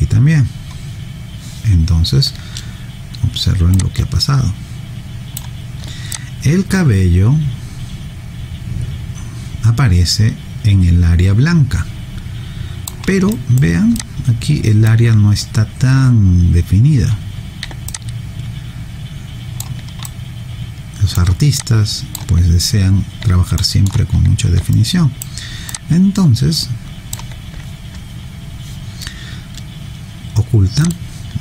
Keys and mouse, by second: 3.8 click, 6.1 alt+click, 13.3 alt+right click, 14.0 alt+click, 17.9 alt+click, 20.0 alt+right click, 21.6 alt+click, 23.6 alt+middle click, 24.7 alt+right click, 25.7 alt+click.